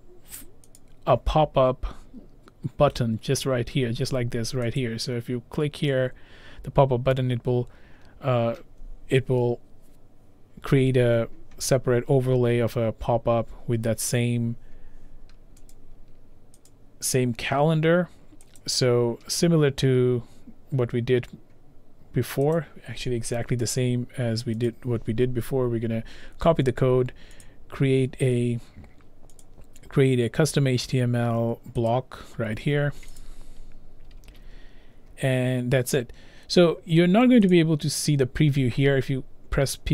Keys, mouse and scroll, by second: 0.8 click, 4.8 click, 15.8 click, 16.7 click, 18.6 click, 22.6 click, 24.5 click, 24.7 click, 27.5 click, 28.5 scroll, 28.6 scroll down 2, 29.2 scroll, 29.4 click, 31.9 click, 31.9-33.2 scroll, 34.2 ctrl+v, 37.6 click.